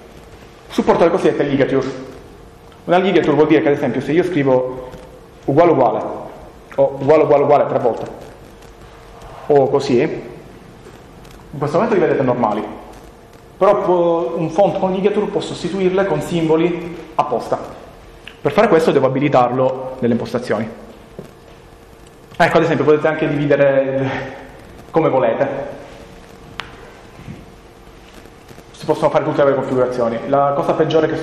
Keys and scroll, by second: 3.3 Return, 5.9 Return, 7.9 Return.